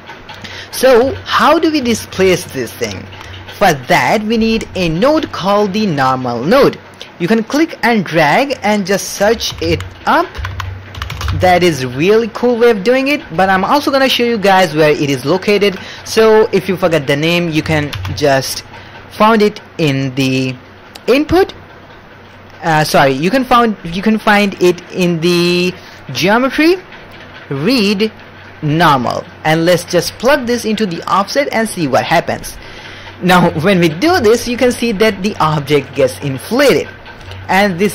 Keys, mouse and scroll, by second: 0.6 middle click, 1.0 alt+a, 1.6 middle click, 1.9 shift+middle click, 2.2-2.8 ctrl+middle drag, 2.9 shift+middle click, 3.5 ctrl+middle click, 4.6-5.0 ctrl+middle drag, 5.5 middle click, 6.5 middle click, 7.1-13.3 drag, 10.5 BackSpace, 14.5 middle click, 17.1 middle click, 17.9 shift+a, 30.5-32.8 drag, 33.5-34.0 ctrl+middle drag, 34.1 shift+middle click, 34.4 ctrl+middle click, 34.7 ctrl+middle click, 35.2 middle click, 37.3 ctrl+middle click.